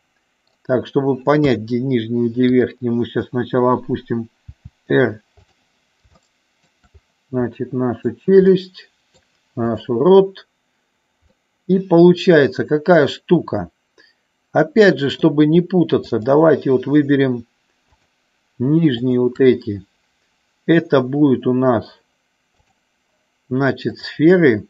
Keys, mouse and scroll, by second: 1.4 KP_3, 4.5 r, 6.3 middle click, 7.6 middle click, 8.6 middle click, 9.7-11.2 drag, 11.3-15.3 middle drag, 16.1-17.5 shift+drag, 22.5-24.2 drag.